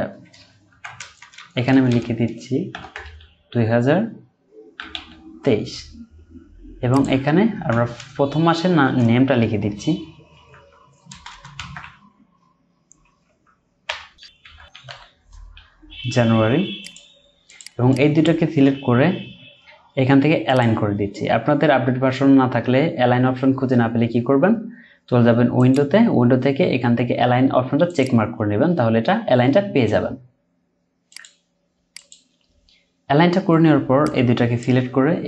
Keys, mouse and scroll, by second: 0.7 Right, 1.0 BackSpace, 1.2 BackSpace, 2.7 typing, 4.8 typing, 8.5 typing, 10.3-11.3 typing, 13.0-14.9 typing, 17.9 double click, 34.8 Right.